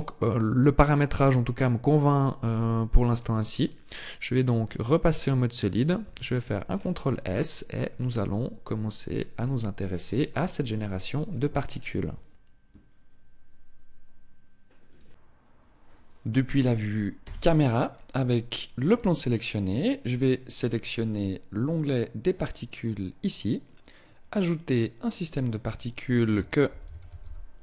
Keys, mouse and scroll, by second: 2.0 click, 3.5 click, 5.7 ctrl+s, 6.3-7.2 scroll down 6, 7.2 shift+middle click, 7.8 middle click, 9.1 shift+middle click, 9.7-10.3 scroll up 2, 10.3 right click, 11.0 middle click, 16.8 KP_0, 18.4 right click, 21.8 click.